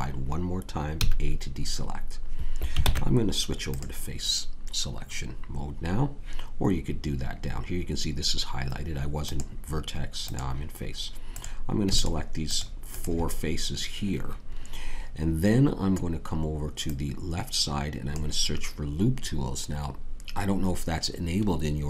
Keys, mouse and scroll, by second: 0.9 a, 2.8 ctrl+Tab, 9.2-21.8 drag.